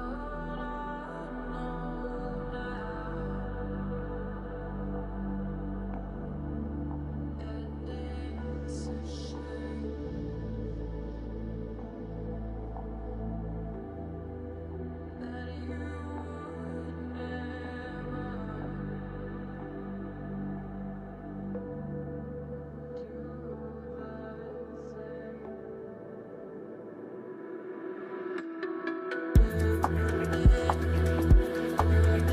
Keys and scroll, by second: 16.4 space, 18.5 space, 20.0 space, 21.0 space, 21.9 space, 28.5 space, 30.4 space.